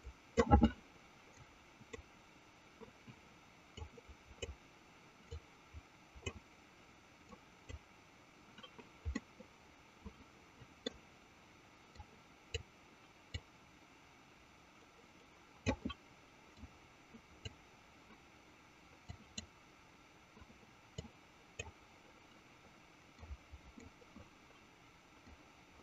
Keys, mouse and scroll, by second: 1.6 click, 3.9 click, 5.6 click, 7.5 click, 9.1-10.9 middle drag, 12.2 click, 13.6-15.9 drag, 16.8 click, 19.3 click, 21.1 click, 23.4 click, 25.4 click.